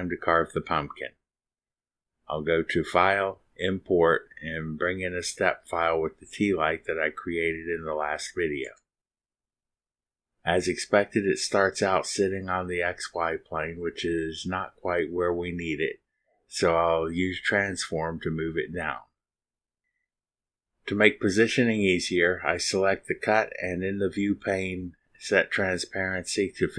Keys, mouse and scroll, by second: 1.0 space, 4.4 click, 5.7 click, 7.9 click, 9.9 click, 15.7-16.1 scroll up 1, 19.4 click, 20.4 click, 21.2-22.8 drag, 23.5 click, 24.2-24.7 scroll up 2, 25.3 click.